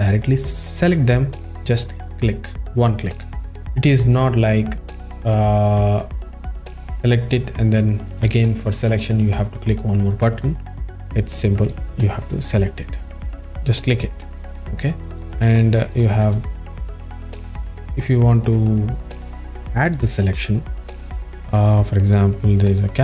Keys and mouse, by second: 0.8 click, 6.9 click, 13.7 click, 17.2 click.